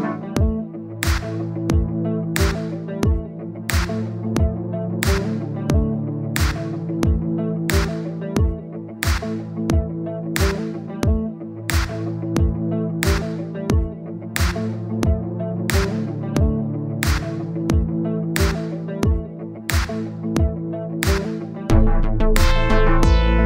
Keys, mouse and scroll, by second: 1.1 click, 2.1 click, 2.3-3.6 middle drag, 5.3 click, 5.6-6.8 scroll down 1, 7.7 click, 8.6-9.8 drag, 11.6 click, 12.3-13.5 middle drag, 13.7 click, 14.1-15.3 middle drag, 15.8-16.9 drag, 16.9 middle click, 17.3 click, 18.3 middle click, 18.7 click, 19.5 middle click, 19.9-22.2 drag, 22.2 middle click, 22.5-23.4 drag.